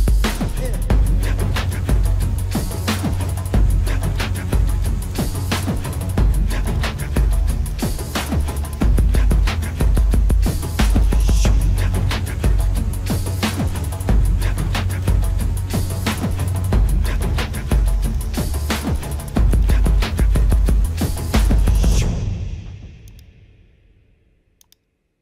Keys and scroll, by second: 0.8 space, 7.7 ctrl+=, 8.9-11.9 typing, 13.4 space, 13.9 ], 15.0 space, 15.6 space, 16.6-20.6 typing, 21.9 space, 23.3 space, 24.9 space.